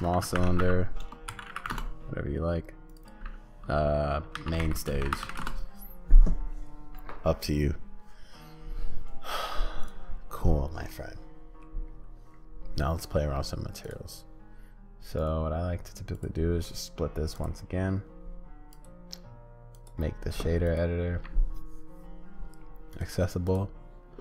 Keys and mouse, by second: 3.0-10.9 drag, 10.9 middle click, 15.2-17.4 drag, 18.8-20.8 drag, 23.4 click.